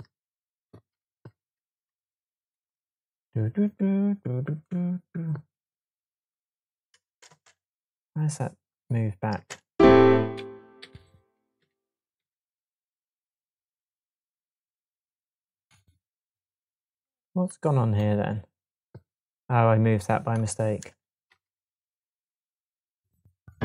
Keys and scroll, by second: 1.3 super+z, 7.0 space, 9.3 space, 10.3 Right, 11.5 Left, 12.1 Right.